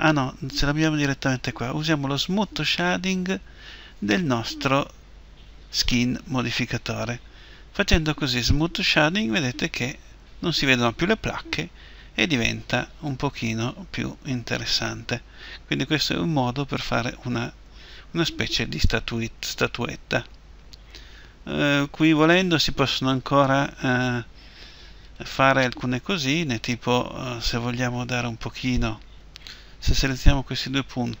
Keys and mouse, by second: 8.1-12.5 drag, 12.5-14.4 middle drag, 24.8-31.2 right drag.